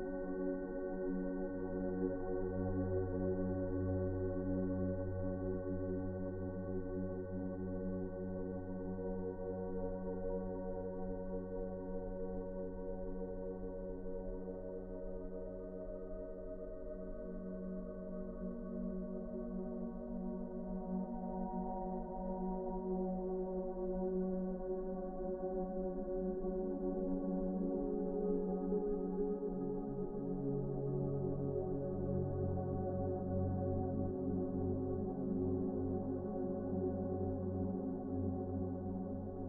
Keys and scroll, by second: 1.4-1.9 typing, 28.9 ctrl+d.